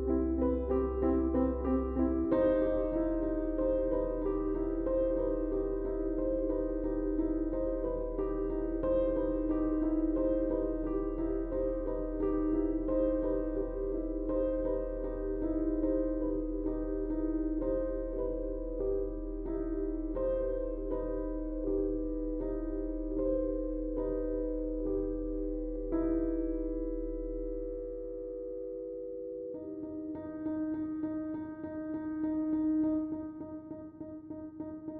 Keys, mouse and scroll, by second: 9.0 Tab, 10.5 click.